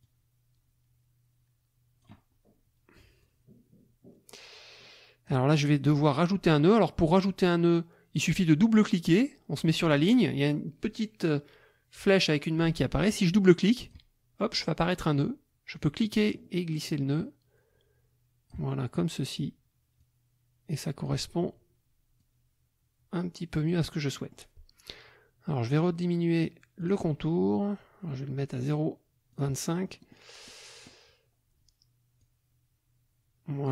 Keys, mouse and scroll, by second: 0.0-2.2 drag, 3.2-5.4 drag, 5.6 middle click, 13.7 click, 15.8-18.7 drag, 20.0-21.2 drag, 22.2-24.5 drag, 25.7 right click, 26.8 click, 28.7 right click, 29.3 click, 29.8 middle click, 30.4 middle click, 32.2-33.7 drag.